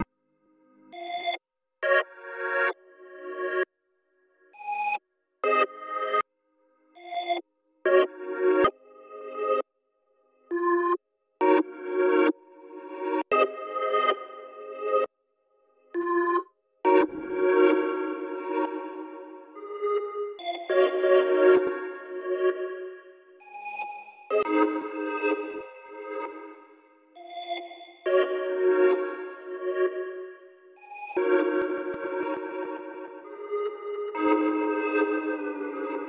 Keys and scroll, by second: 24.4 typing.